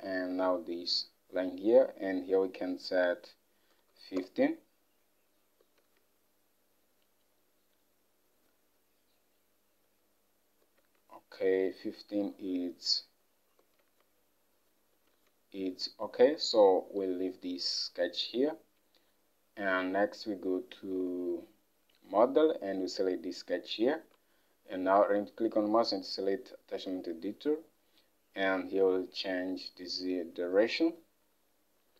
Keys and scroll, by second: 3.8 typing, 4.3 Return, 5.9 alt+Tab, 31.0 Up, 31.3 Up.